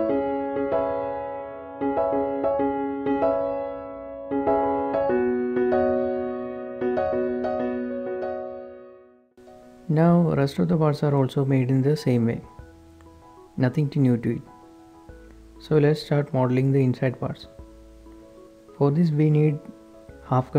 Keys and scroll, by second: 0.9 KP_7, 1.3 g, 2.5 Tab, 2.5-3.4 typing, 2.5 Right, 2.5 Left, 2.7 Return, 2.7 Tab, 5.0 KP_9, 5.5 Return, 5.7 Tab, 5.9 Tab, 6.2 alt+h, 6.4 Tab, 6.7 Tab, 16.0 shift+h, 17.2 h, 18.3 typing.